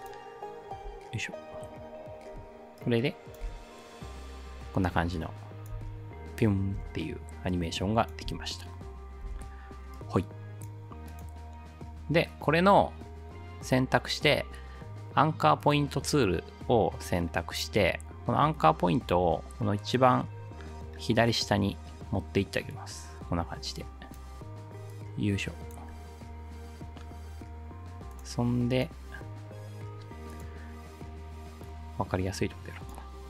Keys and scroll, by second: 3.5 ctrl+alt+space, 5.8 space, 6.8 space, 8.3 space.